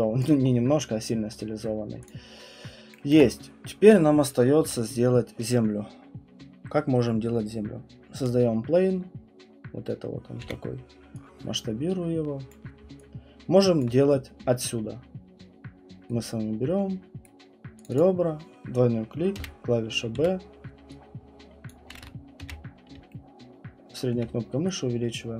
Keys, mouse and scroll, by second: 0.3 alt+click, 0.4 scroll, 1.4 scroll, 2.0 click, 4.2 middle click, 4.2 middle click, 4.3 middle click, 4.8 middle click, 4.9 middle click, 4.9 middle click, 8.2 click, 9.3 scroll, 10.4 r, 12.5 click, 13.8 alt+click, 14.8-17.2 scroll, 17.2 right click, 17.2 scroll, 17.8 middle click, 17.8 click, 18.0 click, 18.0 alt+click, 19.4-20.2 typing, 21.7 click, 21.9 ctrl+z, 22.4-24.6 typing, 24.1 middle click.